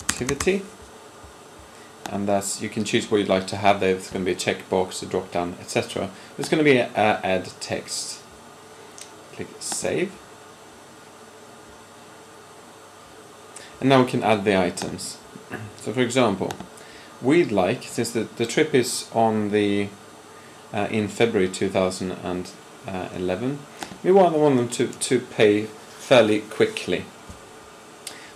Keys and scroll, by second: 0.0-0.3 typing.